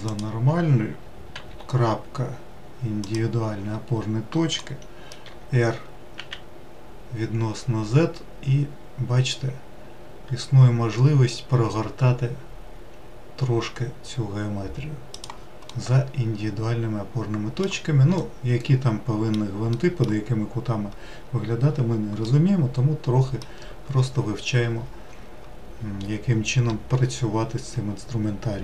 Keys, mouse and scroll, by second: 1.3 ., 4.6 middle click, 5.2 r, 15.7-20.3 middle drag, 20.3-20.7 scroll down 2, 22.2-25.2 middle drag.